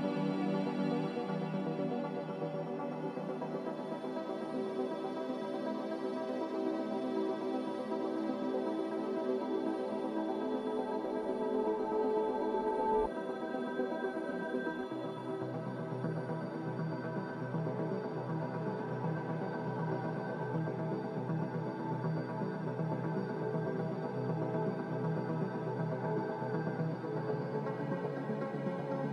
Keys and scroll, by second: 18.7 q, 28.1-29.1 typing.